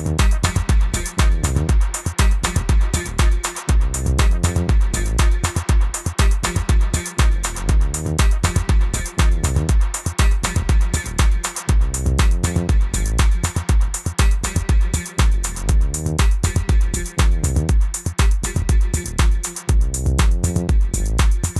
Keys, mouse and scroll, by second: 1.5 KP_Enter, 2.0 BackSpace, 3.7 click, 4.5 b, 4.9 right click, 5.0 click, 14.0-15.3 typing, 15.6 click, 21.4 click.